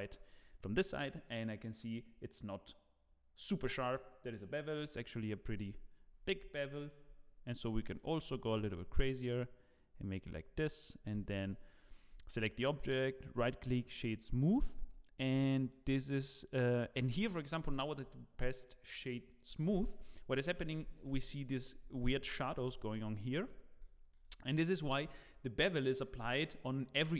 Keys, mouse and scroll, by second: 5.4-6.4 scroll up 2, 6.4 scroll up 2, 6.5 shift+middle click, 8.1 shift+middle click, 10.2 shift+click, 10.5 right click, 11.4 click, 11.7-12.2 scroll down 8, 12.6 right click, 14.7 scroll up 4, 15.4 shift+middle click, 16.9 scroll up 1, 17.2 shift+middle click, 21.0-21.3 scroll down 4, 21.2 middle click, 21.9 shift+middle click, 23.5 scroll down 1, 23.9 shift+middle click.